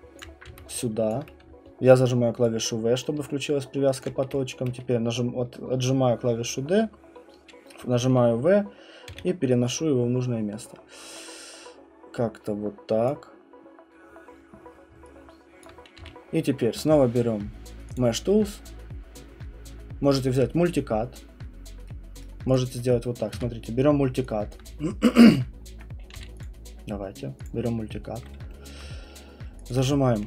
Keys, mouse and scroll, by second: 0.0-0.5 typing, 0.2 click, 1.1 alt+click, 1.6-4.0 typing, 4.0 click, 9.1 r, 13.1 click, 15.6 alt+click, 16.0 q, 17.9 click, 22.2 right click, 22.5 click, 23.3 s, 24.5 alt+click, 24.8 middle click, 25.0 middle click, 25.2 alt+middle click, 25.2 alt+middle click, 26.1 q, 26.4 click, 27.4 click, 28.7 alt+middle click, 29.7 alt+click.